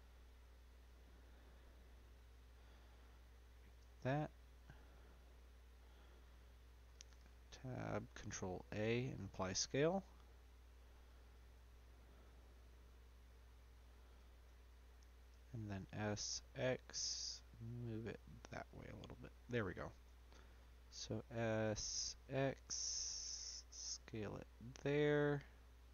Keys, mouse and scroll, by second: 1.2 e, 5.0-6.9 middle drag, 6.9 Tab, 7.9 ctrl+a, 9.3 middle click, 9.7 Tab, 10.3-11.0 scroll down 1, 11.0 click, 12.5-14.2 middle drag, 14.2 ctrl+z, 15.3 s, 19.8 Tab, 21.6 s, 25.1-25.9 middle drag.